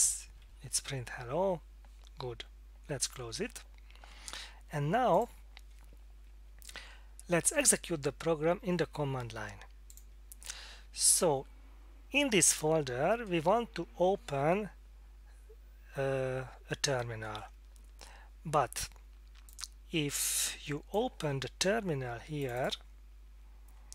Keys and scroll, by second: 0.4 Left.